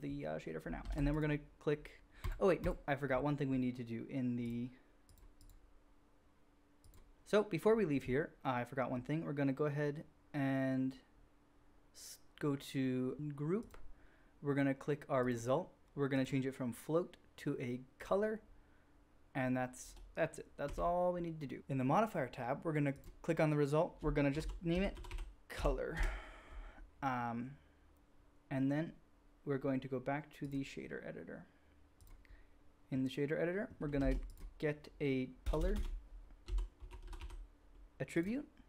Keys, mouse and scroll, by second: 0.9 shift+a, 1.0-2.1 middle drag, 4.5-5.2 drag, 5.5-13.1 drag, 13.1-13.6 middle drag, 13.6 drag, 13.8-15.2 middle drag, 15.2-24.1 drag, 20.6 n, 24.3-33.8 drag, 34.0 shift+a, 34.1-38.6 drag, 35.5 BackSpace, 35.7 BackSpace.